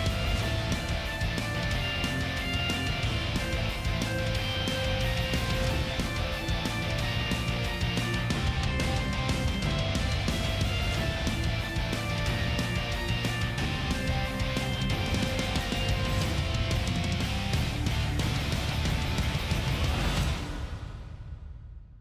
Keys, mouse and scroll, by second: 1.0 double click, 3.2 scroll up 1, 3.4 double click, 4.5-4.9 scroll up 1, 4.9 ctrl+shift+a, 5.4 double click, 6.8 ctrl+shift+z, 6.9 shift+click, 11.9 ctrl+shift+a, 12.3-14.3 typing, 14.1 scroll down 1, 14.4 middle click.